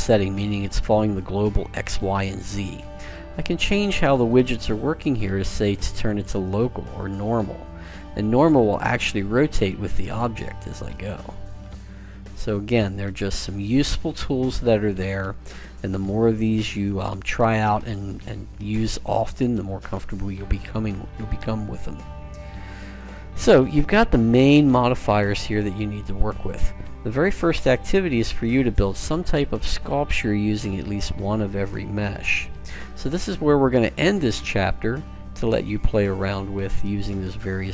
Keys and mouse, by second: 4.3 click, 7.9-10.5 drag, 10.5 middle click, 12.2-13.6 drag, 13.6 middle click, 15.5 click, 18.2-19.8 middle drag, 33.2-35.2 middle drag.